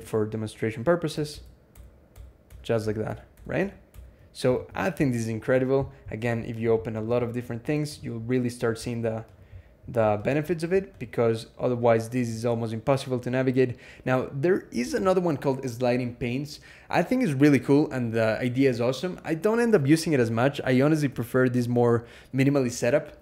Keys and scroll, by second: 1.1 ctrl+Tab, 1.5-3.8 ctrl+Tab, 4.3 alt+x, 14.8 super+a.